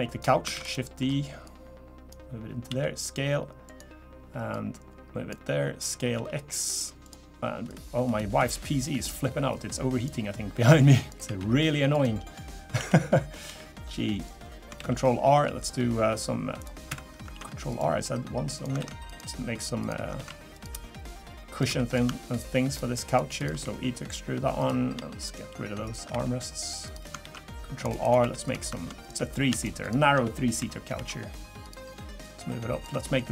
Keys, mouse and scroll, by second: 0.1 click, 0.5 shift+d, 1.0 middle click, 1.4 click, 2.7 s, 4.5 click, 5.4 s, 7.7 click, 9.5 click, 10.6 click, 11.3 e, 12.8 l, 13.5 g, 14.8 ctrl+r, 16.9 Escape, 17.3 ctrl+r, 18.8 ctrl+r, 20.2 ctrl+r, 21.7 3, 21.9 click, 22.3 shift+click, 22.7 shift+click, 23.1 click, 23.6 e, 25.2 shift+click, 25.8 shift+click, 26.1 e, 27.2 ctrl+r, 28.2 3, 28.4 click, 29.0 click, 29.6 shift+click, 29.8 click, 30.6 i, 32.2 click, 33.1 middle click.